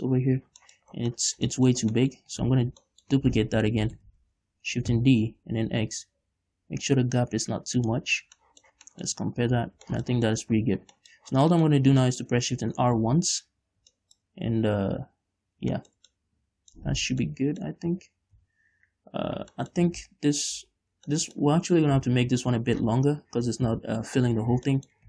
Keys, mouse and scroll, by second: 0.4-0.8 scroll down 1, 1.1 shift+middle click, 1.4 scroll down 1, 1.6-2.7 shift+middle drag, 2.7 scroll up 1, 2.9 ctrl+z, 3.1 scroll down 1, 3.3 shift+middle click, 4.3 ctrl+z, 8.3 shift+d, 8.4 shift+click, 8.7 scroll down 1, 9.1 middle click, 9.6-10.1 scroll up 3, 10.1 scroll down 2, 10.4 shift+middle click, 11.0-11.4 scroll up 2, 11.4-17.4 shift+middle drag, 11.8-12.4 scroll down 4, 13.4 shift+r, 17.4 z, 17.7-18.8 middle drag, 18.8 KP_5, 19.8 scroll down 2, 20.0-22.4 shift+middle drag, 20.4 ctrl+z, 22.4 KP_7, 23.2 z, 24.1 KP_5, 24.9 scroll up 1.